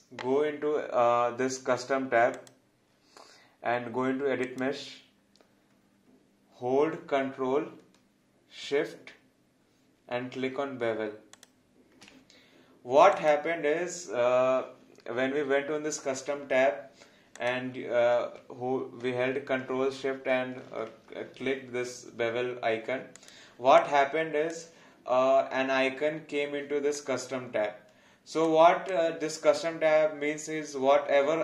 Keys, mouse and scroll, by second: 11.3 click, 17.3 click, 23.1 click, 23.8 click, 27.0 click, 28.9 click.